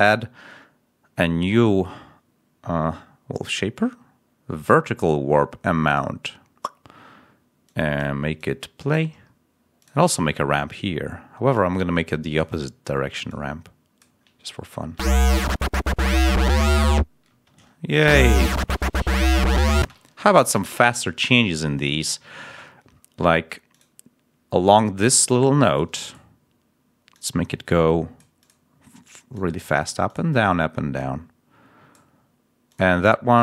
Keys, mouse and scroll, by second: 5.8 click, 6.4 scroll down 1, 7.5 click, 9.1 scroll up 2, 14.8 space, 17.2 space, 17.9 l, 18.5 scroll up 2, 19.7 space, 20.0 ctrl+scroll up 2, 21.7 scroll down 2, 22.9 ctrl+scroll up 2, 23.6 ctrl+click, 24.6 click, 25.2 click, 25.9 click, 27.0-28.3 drag, 28.3 click, 29.2 click, 30.9-32.0 drag, 32.6 click.